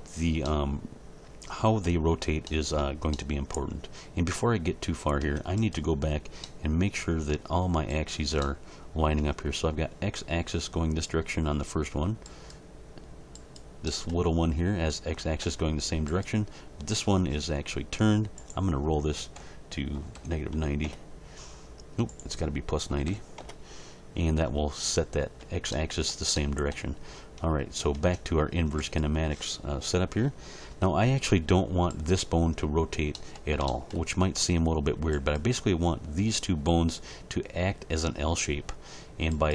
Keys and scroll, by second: 5.2 Tab, 18.3 0, 20.8 Return, 22.9 9, 23.0 0, 23.4 Return, 28.0 Tab.